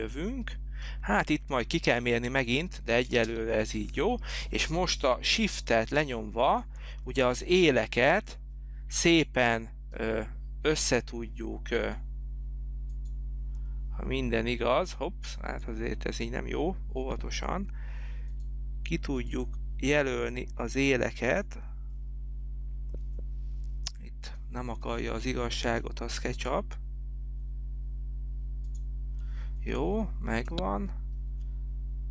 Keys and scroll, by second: 3.4 space.